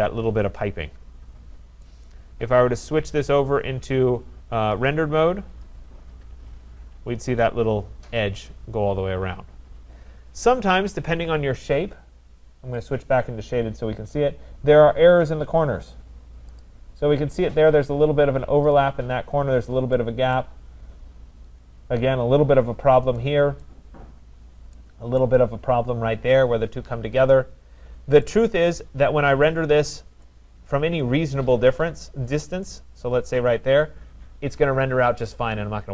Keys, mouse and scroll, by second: 1.4 middle click, 1.8 right click, 3.2 click, 5.6 click, 7.1-8.2 scroll, 8.2 scroll, 11.3 click, 12.8 click, 13.0 click, 13.4-14.0 scroll, 14.9 scroll down 2, 15.4 scroll down 1, 16.6 click, 18.4 scroll, 18.7 click, 19.0 scroll, 20.4 right click, 20.9-21.4 scroll, 22.7 scroll, 23.6 right click, 24.2 scroll, 25.2 right click, 28.2 right click, 28.5 scroll, 29.4 scroll, 30.2 right click, 30.5 scroll, 32.0 right click, 32.3 scroll, 32.9 scroll, 35.7 middle click.